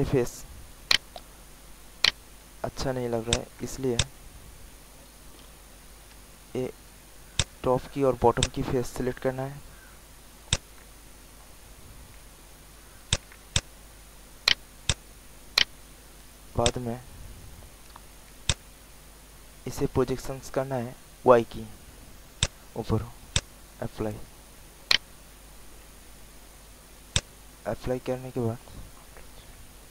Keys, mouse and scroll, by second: 0.5 alt+middle click, 0.8 alt+right click, 1.5 alt+middle click, 2.0 alt+right click, 3.2 shift+click, 3.9 alt+shift+click, 5.4 alt+click, 7.3 shift+click, 8.3 shift+click, 11.7 alt+click, 13.0 shift+click, 13.5 alt+shift+click, 14.4 alt+right click, 14.8 alt+click, 15.0 alt+click, 15.5 alt+right click, 16.6-19.1 drag, 19.3 alt+middle click, 20.1 alt+click, 22.3 click, 24.1 alt+middle click, 24.8 alt+right click, 27.1-28.8 drag.